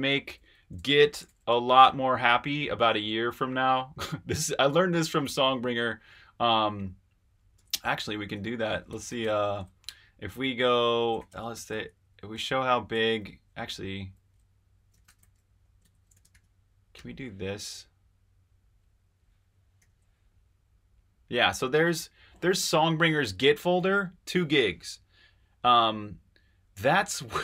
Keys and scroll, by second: 0.0-1.7 typing, 7.5 super+`, 8.6-9.7 typing, 10.8-16.9 typing, 19.8 super+i.